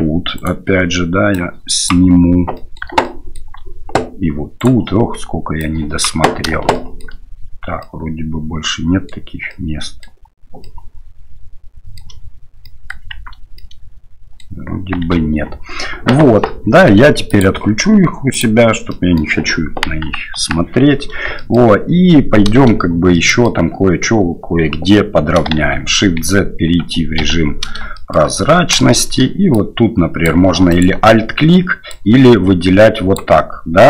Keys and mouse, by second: 0.3 right click, 1.4 click, 2.5 middle click, 3.0 shift+middle click, 4.6-5.6 right drag, 5.6 click, 6.7 shift+middle click, 7.8-9.1 middle drag, 9.5 middle click, 10.6-12.0 middle drag, 12.7 shift+middle click, 13.1 shift+z, 13.6 middle click, 17.3-18.8 drag, 18.9 middle click, 19.8 KP_1, 20.3 KP_3, 21.3 shift+click, 23.1 shift+click, 25.6 shift+z, 27.2 1, 27.9 shift+middle click, 28.9 shift+click, 29.5 click, 30.7 alt+right click, 32.0-33.2 drag.